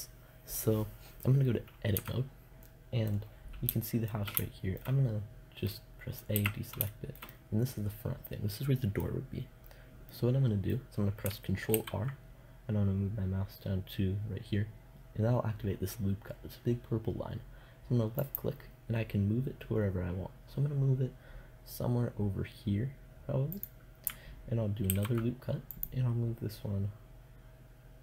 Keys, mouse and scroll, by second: 1.4 Tab, 5.8 a, 11.2 ctrl+r, 23.1-25.2 drag, 24.3 ctrl+r.